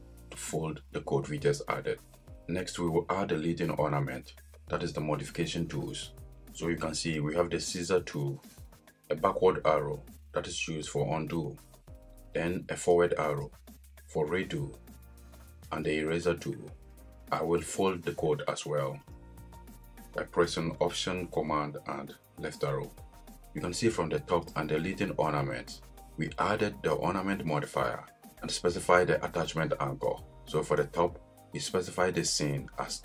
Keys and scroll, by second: 22.2 alt+super+Left.